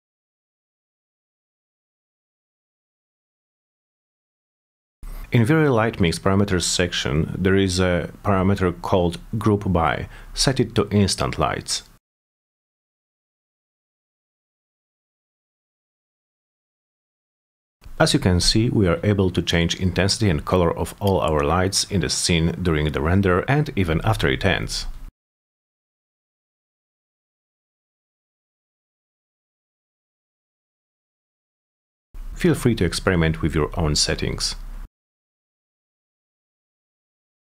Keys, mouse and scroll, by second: 0.4-3.2 drag, 3.7 click, 5.2 click, 6.6 click, 7.2 click, 8.1 click, 8.7-9.1 drag, 12.4 drag, 13.2 click, 14.0 click, 18.1 middle click, 18.6 middle click, 19.4 click, 20.6 click, 34.9 click, 36.0 click, 36.3-37.5 typing, 36.4 Return.